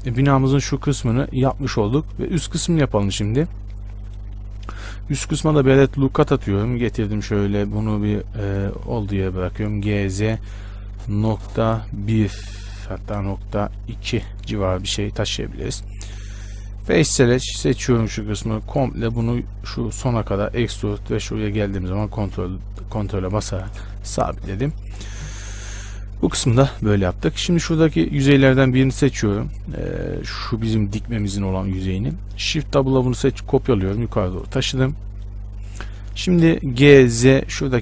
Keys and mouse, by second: 3.3 Tab, 5.6 ctrl+r, 10.0 g, 16.4 click, 17.4-19.8 middle drag, 19.8 e, 26.6 z, 28.7 z, 29.4 z, 30.1 z, 30.4 z, 31.8 z, 33.0 shift+d, 37.0 g.